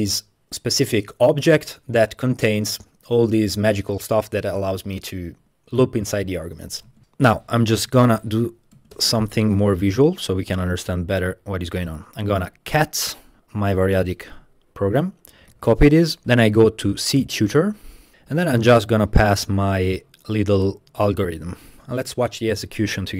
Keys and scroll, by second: 6.9 Tab, 7.0-8.6 typing, 8.8 Tab, 9.0 Return, 15.5 super+c, 16.2 typing, 16.4 Return, 18.2 super+a, 18.3 super+v.